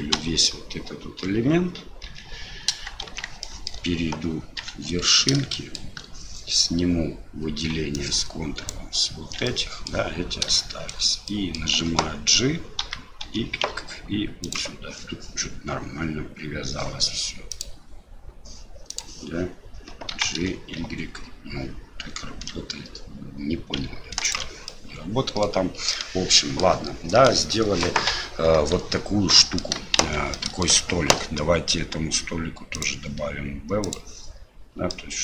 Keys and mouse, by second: 0.1 l, 2.0 KP_7, 3.1 shift+z, 3.4 shift+click, 4.6 1, 5.5 shift+middle click, 8.0 ctrl+click, 9.4 middle click, 10.5 shift+middle click, 11.2 middle click, 12.8 g, 17.6-19.2 drag, 24.8 middle click, 26.0 middle click, 27.3 middle click, 28.7 Tab, 29.4 middle click, 30.0 shift+z, 30.3 middle click, 32.9-33.9 drag, 34.9-35.2 middle drag.